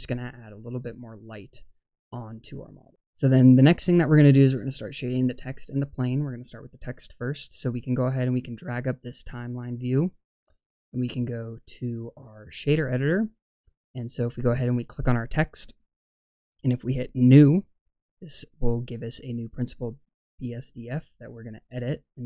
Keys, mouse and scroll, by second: 8.4-10.1 drag, 11.0 click, 14.6 click, 16.7 click, 17.8-18.1 scroll up 3, 18.8 middle click.